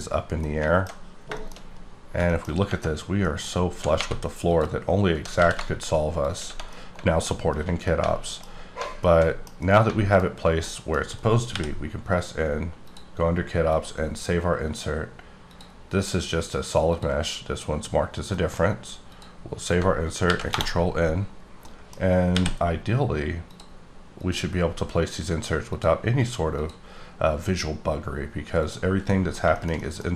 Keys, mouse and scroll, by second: 0.1 scroll up 4, 0.4 scroll down 1, 0.5 middle click, 1.3 middle click, 1.7-2.6 scroll up 8, 2.3 shift+middle click, 2.9 scroll down 3, 3.2 middle click, 3.6 scroll down 4, 3.9 3, 4.4 click, 5.1 g, 5.4 z, 6.3 shift+click, 6.5 shift+Tab, 6.7 middle click, 7.5-7.9 scroll up 1, 7.9 middle click, 10.7 middle click, 10.9-11.4 scroll down 3, 11.4 n, 12.8 click, 13.6 click, 15.5 click, 16.8 click, 18.4 middle click, 19.1 click, 20.3 ctrl+n, 20.7 Return, 21.2-21.7 scroll up 6, 21.7 middle click, 22.3 n, 23.5 click, 24.2 click, 25.7 click, 26.6 click, 28.6 click, 29.1 middle click, 29.4 shift+middle click.